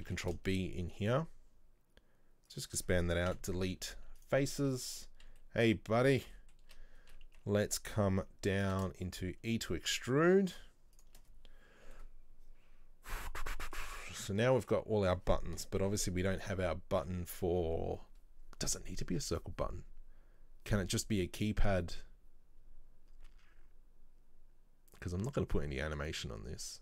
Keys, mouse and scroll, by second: 0.2 ctrl+b, 4.6 middle click, 5.1-5.5 scroll up 2, 5.5 shift+middle click, 6.1 scroll up 2, 6.4 middle click, 6.8 a, 7.6-8.0 scroll down 1, 8.7 e, 12.0-15.7 middle drag, 15.7 KP_7, 16.3 scroll down 2, 16.6-19.6 middle drag.